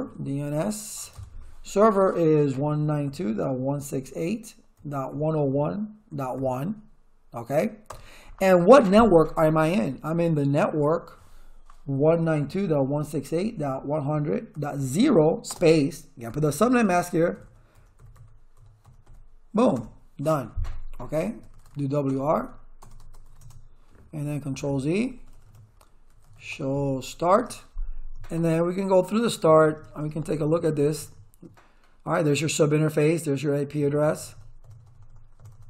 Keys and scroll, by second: 0.0-0.9 typing, 1.1 Tab, 2.3-6.8 typing, 7.9 Return, 9.6-19.5 typing, 19.7 Return, 20.9-23.7 typing, 24.5 ctrl+z, 24.9 Return, 25.8-27.6 typing, 33.8 Return.